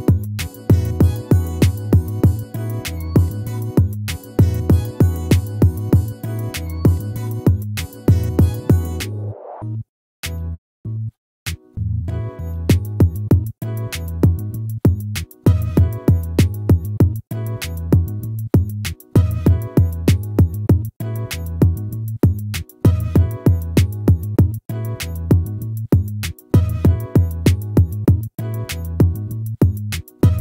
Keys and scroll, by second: 7.2 ctrl+-, 10.9 ctrl++, 25.3 ctrl+-.